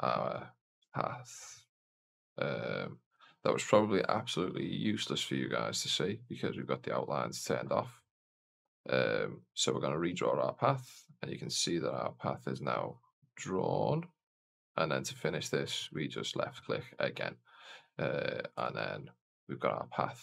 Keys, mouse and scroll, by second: 6.4 click, 9.4 click, 15.7 click, 18.5-20.2 right drag.